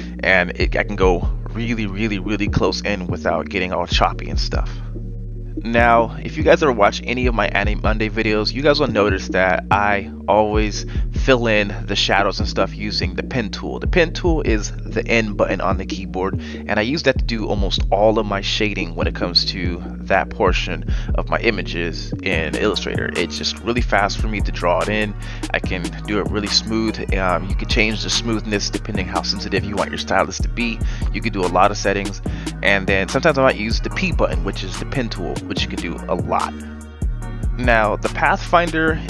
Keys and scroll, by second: 7.4 n, 8.9 Caps_Lock, 19.5 Delete, 23.3 p, 31.4 Delete, 33.2 Delete.